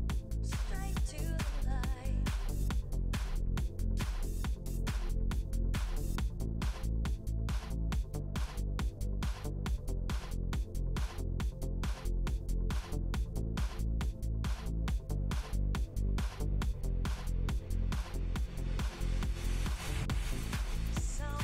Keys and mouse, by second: 0.6-3.0 typing, 4.2 e, 5.1 e, 5.6 e, 7.1 alt+m, 8.1 ctrl+Tab, 8.5-12.3 drag, 9.3-9.8 f, 11.3 f, 11.6 f, 11.7 f, 11.9 f, 12.6 ctrl+Tab, 13.6-17.2 drag, 14.2 w, 15.2 g, 17.2 f, 17.9 ctrl+r, 18.5 ctrl+Tab, 18.8-21.4 drag, 20.1 f, 20.4 f, 21.3 f.